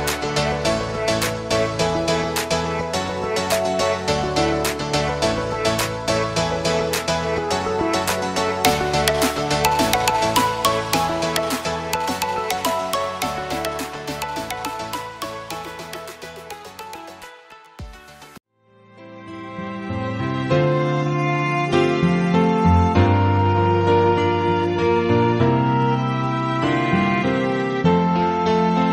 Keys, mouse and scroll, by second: 1.9 click, 4.8 click, 5.2 alt+scroll down 1, 6.1 click, 7.2 alt+scroll up 1, 7.7 space, 8.0 alt+scroll up 1, 8.5 space, 9.3 alt+scroll up 1, 9.5 click, 10.0 space, 10.5 alt+space, 10.6-10.9 alt+scroll up 1, 11.1 space.